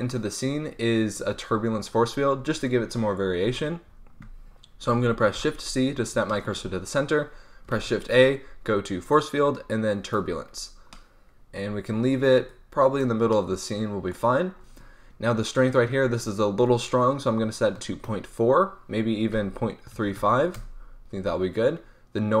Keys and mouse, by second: 4.4 middle click, 5.3 shift+c, 5.8-6.2 middle drag, 7.7 shift+a, 10.8 click, 10.9 middle click, 11.0 click, 11.2 click, 12.4-14.2 drag, 16.1-20.4 drag, 20.4-22.4 middle drag.